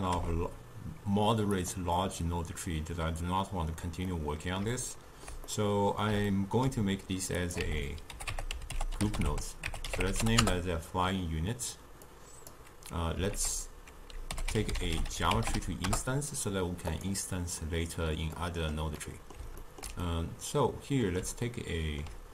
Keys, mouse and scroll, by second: 0.2 g, 4.1-4.8 middle drag, 4.9-7.4 ctrl+middle drag, 7.4-10.5 drag, 12.1 click, 13.4 ctrl+a, 18.4-22.3 middle drag.